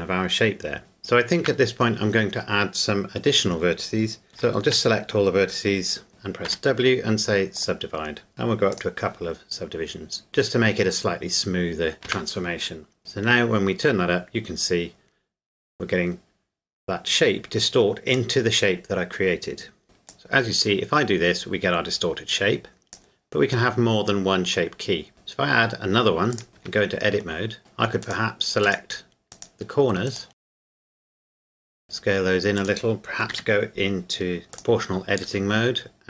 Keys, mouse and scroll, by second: 0.8 right click, 1.4 Tab, 4.3 Tab, 4.3 a, 4.7 a, 6.5 w, 7.5 click, 12.0 Tab, 13.0 click, 19.8 Tab, 20.1 click, 26.3 click, 26.6 Tab, 27.6 right click, 28.0 shift+right click, 30.5 middle click, 30.9 shift+right click, 31.5 s, 32.6 click, 33.3 o, 34.5 click, 35.2 s.